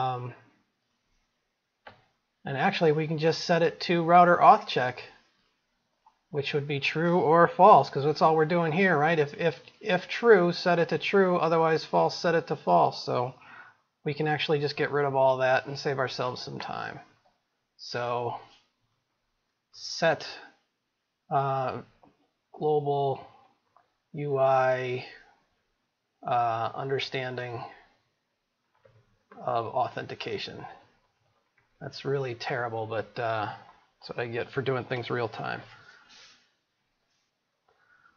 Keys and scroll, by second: 4.1 ctrl+c, 5.0 ctrl+v.